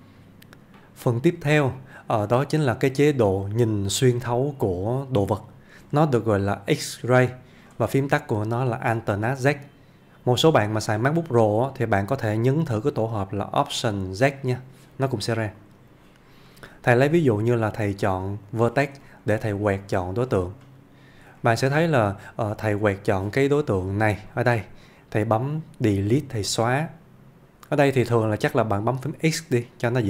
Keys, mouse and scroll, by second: 3.7-5.9 click, 15.6 click, 16.5 middle click, 18.5 click, 19.1 shift+middle click, 19.6-20.2 click, 21.1 scroll up 1, 21.4 shift+middle click, 22.1 scroll down 1, 24.3-25.3 click, 29.8 click.